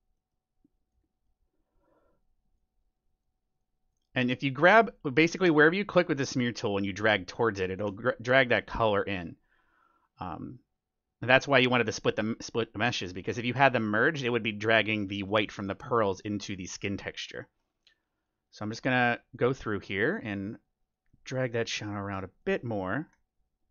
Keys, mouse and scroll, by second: 0.1-1.8 middle drag, 7.7 ctrl+z, 8.1-12.3 drag, 14.8-18.4 middle drag, 18.0-22.6 drag, 21.0-23.7 middle drag, 23.6-23.7 drag.